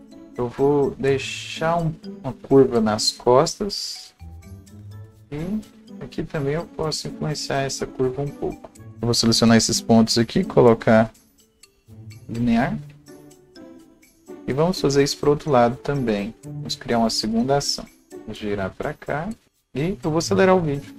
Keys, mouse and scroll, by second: 0.0 right click, 0.3-0.6 scroll down 1, 0.6-4.0 right drag, 1.9-15.3 drag, 4.8 scroll up 1, 7.3-14.6 right drag, 19.2-20.9 drag, 19.5-20.8 scroll up 1.